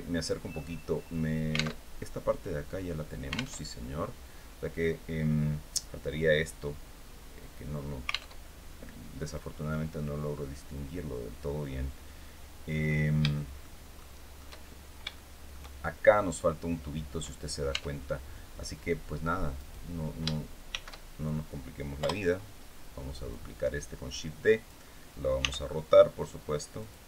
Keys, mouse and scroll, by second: 0.2 scroll up 1, 1.5 alt+Tab, 3.3 alt+Tab, 8.0 alt+Tab, 11.2-11.5 scroll down 2, 11.9 scroll down 2, 12.4-12.7 scroll up 2, 13.0 shift+middle click, 13.3 shift+scroll up 1, 13.6 shift+middle click, 14.3-14.8 shift+scroll up 1, 14.8 shift+middle click, 17.4 Tab, 19.3 right click, 20.4 shift+d, 21.7 Return, 23.0-24.5 drag, 25.1 r, 26.5 click.